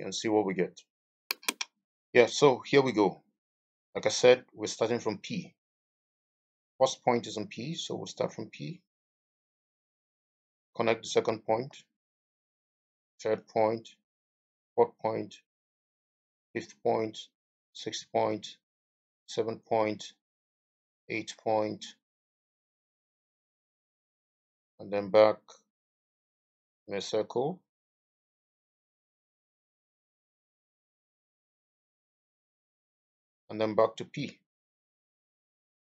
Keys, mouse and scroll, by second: 11.6 middle click, 21.3 middle click.